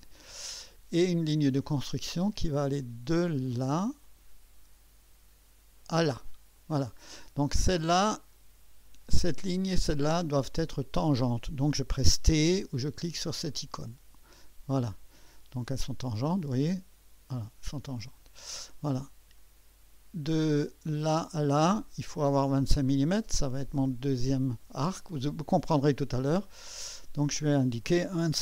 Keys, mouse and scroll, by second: 0.0 click, 1.5 click, 4.0 click, 5.8 click, 8.2 click, 9.0 click, 9.8 click, 10.8 click, 13.4 click, 15.1 click, 16.4-18.2 drag, 19.3 click, 21.0 click, 22.5 click, 24.1 click, 26.8 click, 27.8-28.4 typing.